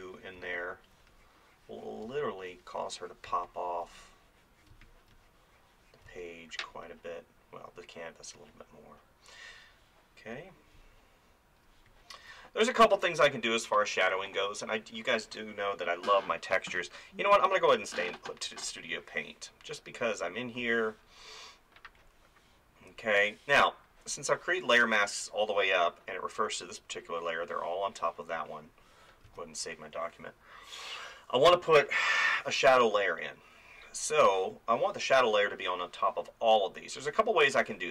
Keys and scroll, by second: 0.4 space, 2.1 space, 29.3 ctrl+s.